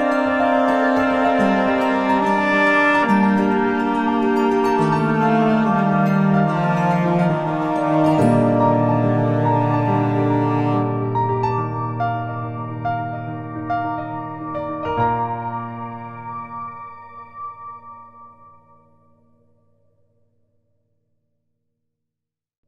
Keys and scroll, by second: 1.7 space, 9.3 ctrl+shift+n, 10.4 Return, 11.5 b, 12.2 ].